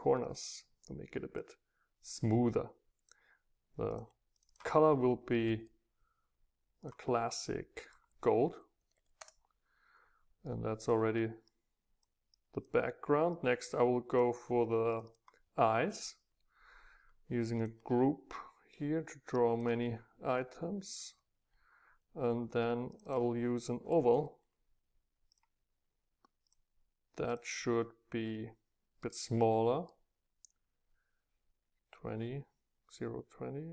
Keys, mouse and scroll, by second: 0.0 click, 0.4 click, 1.1-4.9 drag, 4.9-6.4 middle drag, 6.8-7.8 drag, 7.8-9.1 middle drag, 9.1 Return, 10.4-14.0 drag, 15.0-16.8 middle drag, 17.6-21.0 drag, 22.9-25.1 drag, 25.5-29.0 drag, 29.0-30.4 right drag, 30.5-31.7 right drag.